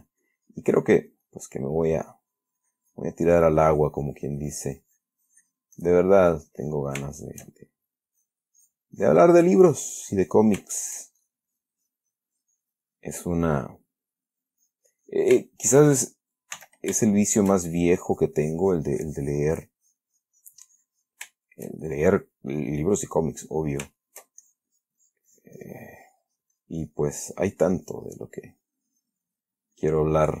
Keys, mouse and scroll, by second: 1.8 middle click, 2.4-7.4 drag, 7.4 shift+middle click, 8.4 click, 9.1 click, 9.8-10.8 drag, 11.0 shift+middle click, 11.5-15.7 shift+drag, 16.9 s, 17.3-17.8 shift+middle drag, 18.3-21.6 shift+drag, 21.7 shift+middle click, 23.7 shift+click, 24.3 shift+middle click, 24.7-29.7 shift+drag, 30.1 click.